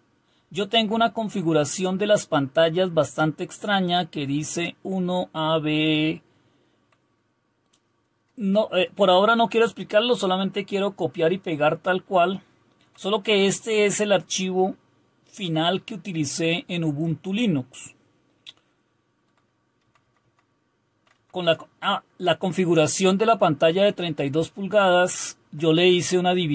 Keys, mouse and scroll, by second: 1.2 Down, 6.7 Down, 6.7 Down, 9.5 Down, 10.2-12.8 Down, 14.7-20.9 Down, 21.4 Down, 25.2 Up, 25.9 Down.